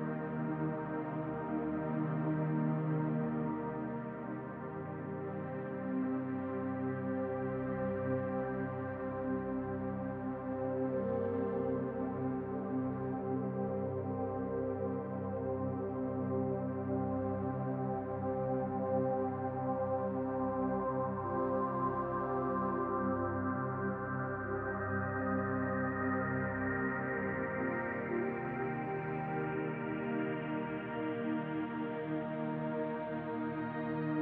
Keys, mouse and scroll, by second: 0.0 Tab, 1.3 g, 3.2 Tab, 4.3 s, 6.3 click, 7.4 g, 13.1 click, 17.3 shift+a, 25.5 g, 30.2 s, 30.9 Tab, 32.0 e.